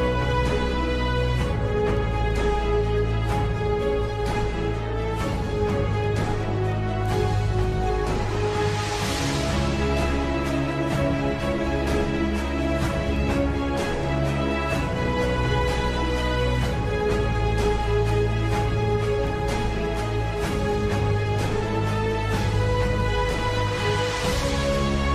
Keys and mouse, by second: 3.2 middle click, 4.1 KP_7, 5.3 shift+d, 7.1 g, 10.9 KP_3, 13.1 g, 17.9 s, 21.2 s.